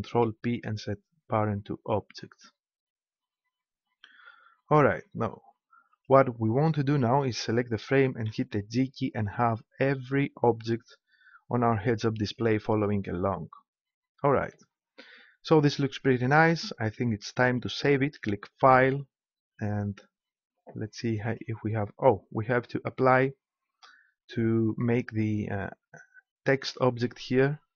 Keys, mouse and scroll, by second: 0.0 ctrl+p, 5.9-7.7 right drag, 8.2 g, 12.4-14.1 right drag, 18.5-20.3 drag, 21.2-23.2 right drag.